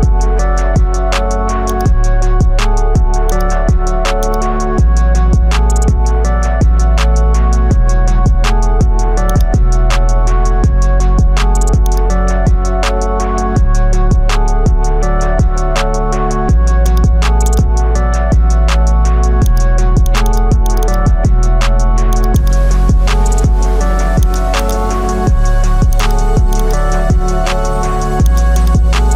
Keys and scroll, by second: 8.5 ctrl+j.